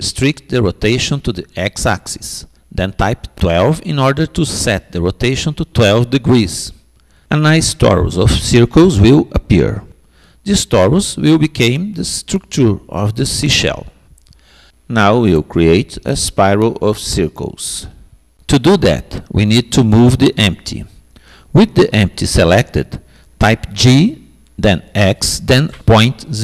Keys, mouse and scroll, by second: 7.7-12.3 middle drag, 16.2-22.6 middle drag, 22.6 g.